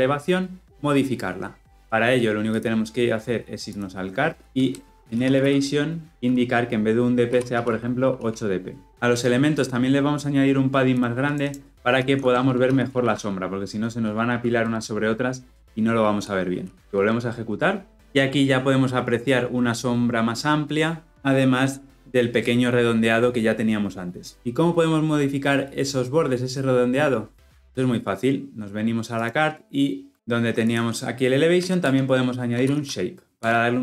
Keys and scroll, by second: 6.1 Return, 14.4 Return, 16.8 shift+F10, 33.2 Return.